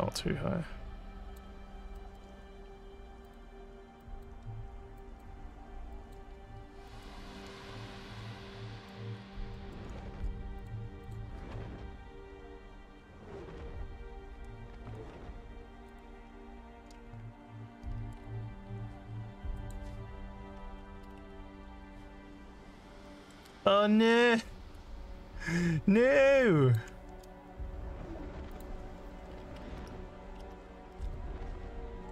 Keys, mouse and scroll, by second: 1.6 alt+scroll down 2, 2.0 alt+middle click, 3.2 click, 4.0 click, 5.0 click, 5.9 click, 6.9 click, 8.1 alt+scroll down 1, 8.3 alt+middle click, 9.2 alt+scroll up 2, 9.6 alt+middle click, 11.1 click, 13.0 scroll down 2, 14.3-14.9 scroll down 4, 15.9 click, 18.2 scroll down 2, 19.6 click, 22.5 alt+scroll up 3, 23.0 alt+middle click, 23.5-26.7 alt+drag, 28.5 click.